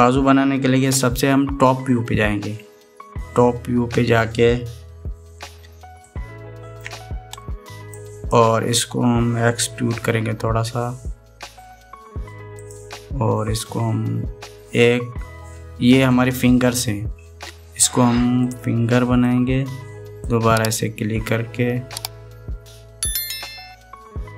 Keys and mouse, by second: 3.0 KP_7, 6.8 shift+middle click, 8.7 click, 10.7 e, 14.4 e, 20.0-21.0 drag, 22.0 e.